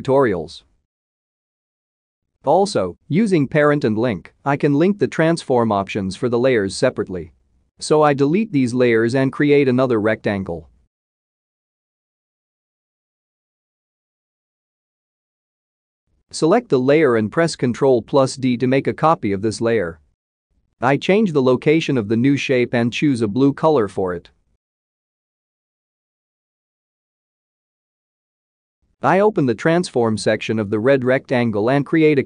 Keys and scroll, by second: 7.0 Delete, 9.8 Delete, 19.3 ctrl+d.